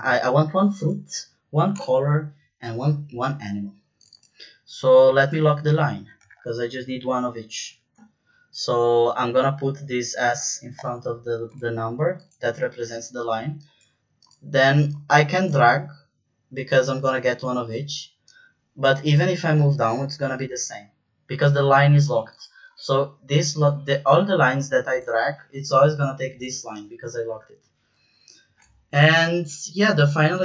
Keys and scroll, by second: 1.7 Return, 7.4 shift+4, 10.7 Return, 30.3 =.